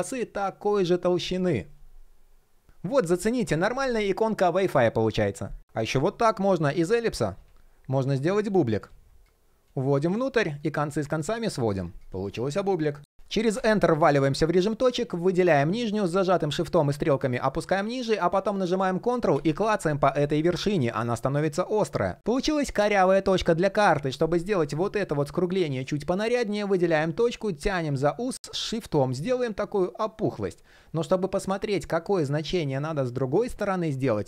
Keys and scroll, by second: 15.7 shift+Down.